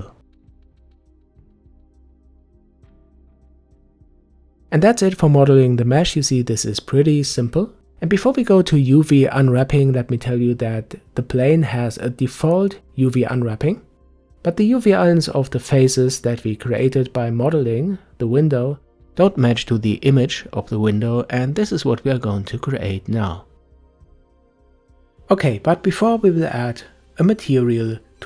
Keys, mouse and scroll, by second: 0.5-0.9 scroll down 1, 0.9 middle click, 2.2-3.2 drag, 3.2 middle click, 4.1 Tab, 4.6-7.5 middle drag, 8.1 click, 11.2 ctrl+s, 23.3 n, 24.1-25.2 drag, 27.1-28.2 drag.